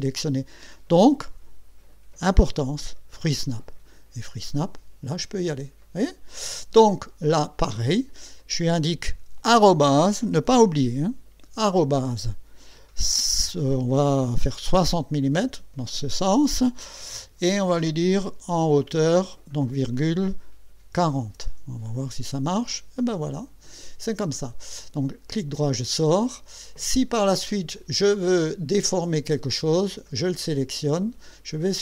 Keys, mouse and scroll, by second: 3.2 click, 7.7 click, 14.7 KP_6, 15.5 KP_0, 19.2 ,, 20.8 KP_4, 21.3 KP_0, 22.3 KP_Enter, 25.3 right click, 27.7-29.0 drag, 29.6-30.6 drag.